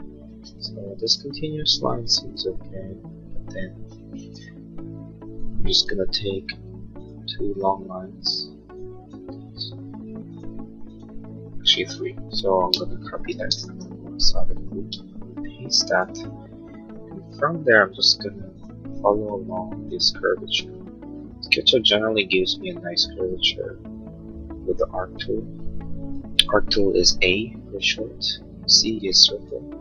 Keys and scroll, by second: 0.2 space, 12.7 ctrl+c, 13.4 space, 13.6 Escape, 17.5 a, 26.0 Escape, 28.9 c, 29.5 a.